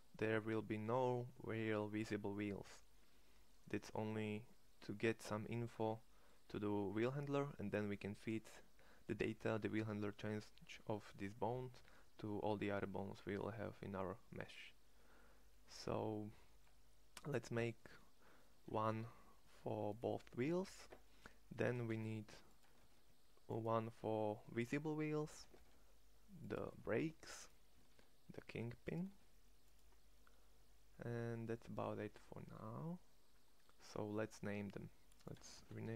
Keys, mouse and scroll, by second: 1.3 middle click, 18.8 shift+d, 21.8 shift+d, 22.7 shift+d, 25.5 shift+d, 26.6 shift+d, 27.8 shift+d, 29.0 shift+d.